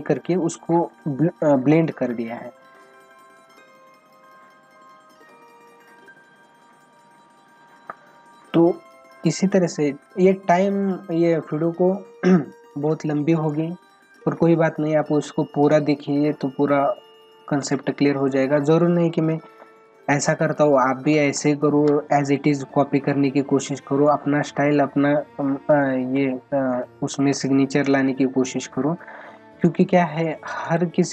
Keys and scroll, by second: 17.6 ctrl+alt+z, 21.1 space, 30.7 space.